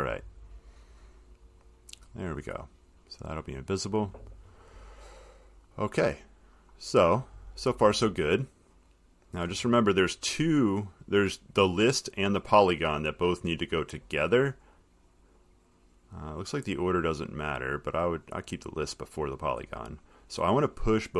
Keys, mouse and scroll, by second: 0.0 click, 1.8 click, 3.6 click, 5.4 middle click, 5.4 middle click, 6.8 middle click, 9.6 click, 11.2 click, 11.8 click, 15.7 click, 17.6 click, 20.2 middle click.